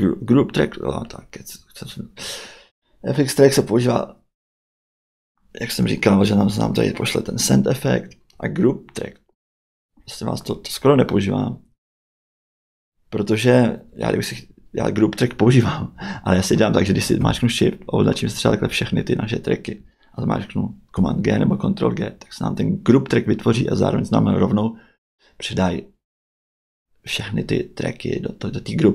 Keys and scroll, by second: 20.9 super+g.